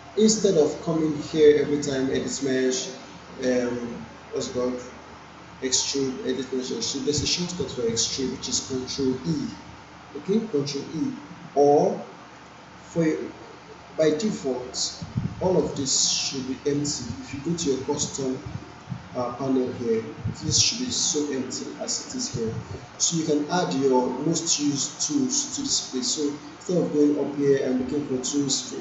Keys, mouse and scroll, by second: 12.4 click, 15.6 right click, 16.8 click, 17.6 right click, 18.7 click, 24.3 click.